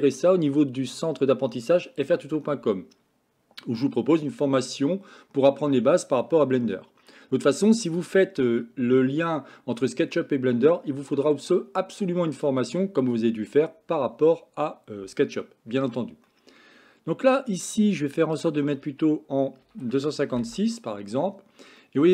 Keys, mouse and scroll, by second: 8.0 click, 16.4-17.4 middle drag, 18.6-20.7 drag, 21.9-22.1 middle drag.